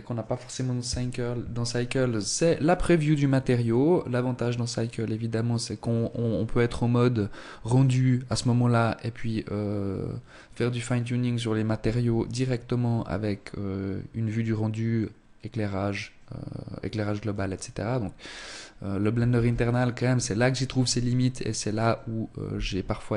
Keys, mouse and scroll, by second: 18.6 ctrl+s, 21.7 scroll up 1, 22.3 shift+middle click.